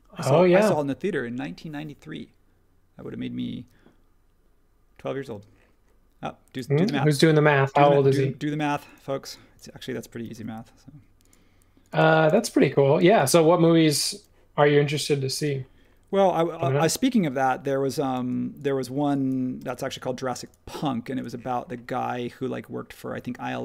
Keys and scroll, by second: 0.6 super+1, 5.3 space, 10.3 m, 12.0 space, 13.0 space, 18.1 space, 19.6 m, 21.2 space.